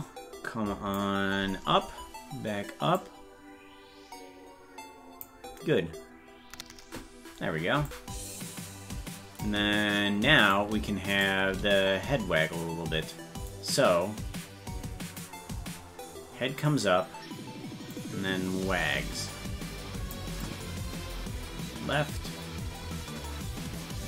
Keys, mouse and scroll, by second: 2.9-5.2 drag, 7.9-9.4 drag, 10.5 right click, 11.2 shift+right click, 13.5-15.2 drag, 17.9-20.1 drag, 20.4-24.0 drag.